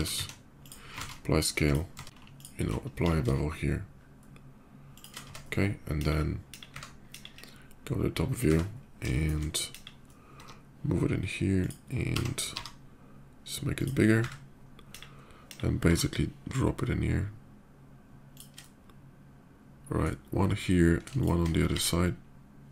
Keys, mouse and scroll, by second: 0.3 z, 0.4 click, 1.2 ctrl+a, 1.4 click, 1.8 Tab, 1.9 middle click, 2.0 ctrl+alt+click, 2.7 ctrl+a, 3.4 ctrl+shift+b, 3.8-4.7 scroll up 1, 4.7 shift+click, 5.0 Tab, 5.7 KP_5, 6.3 KP_5, 7.4 KP_Divide, 7.6 /, 8.9 shift+middle click, 9.4 KP_5, 10.7 g, 11.2 click, 11.7 s, 13.5 click, 13.5 y, 14.7 KP_5, 15.0 middle click, 15.5 KP_5, 15.6 g, 18.1 shift+click, 18.3-19.8 shift+middle drag, 21.0 shift+click, 21.6 alt+x, 22.4 click.